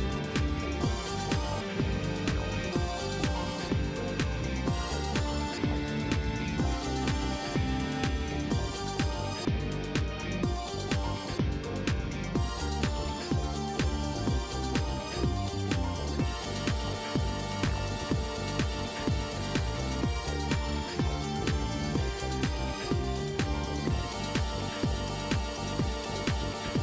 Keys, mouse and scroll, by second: 0.3 click, 0.6 right click, 1.2 click, 3.1 click, 4.3-5.2 typing, 8.2 click, 10.4 click, 14.2-15.5 scroll down 6, 18.0 click, 20.3 scroll down 1, 21.6 click, 23.1 click, 26.3 click.